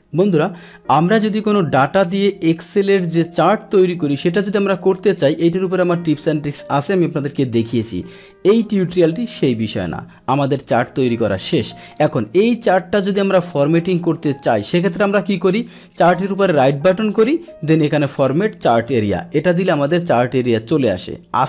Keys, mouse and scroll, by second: 0.2 click, 1.1-4.5 drag, 6.5 alt+F1, 7.0 alt+F1, 9.9-11.9 drag, 16.1 right click, 17.8 click, 20.5 click.